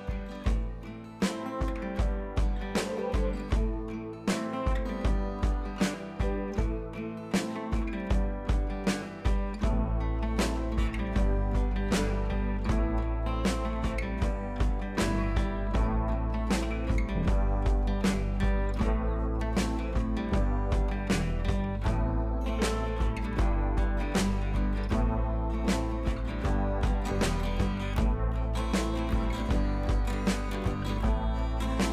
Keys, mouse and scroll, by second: 0.1-0.7 drag, 1.9 shift+Page_Up, 3.7 click, 7.2-8.4 drag, 10.8-18.6 drag, 19.0 click, 20.6 right click, 20.8 click, 21.0 right click, 21.5-22.3 click, 23.6-24.1 scroll down 1, 24.7-25.5 shift+drag, 30.3 Right, 31.7-31.9 drag.